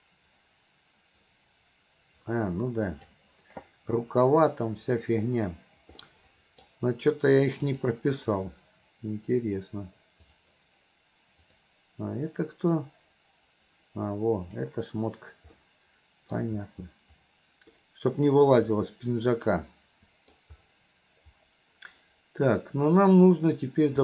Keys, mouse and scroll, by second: 6.1-6.7 middle drag, 7.8 click, 10.3-14.6 drag, 15.5-16.4 middle drag, 17.8-18.5 middle drag, 19.6-20.4 middle drag.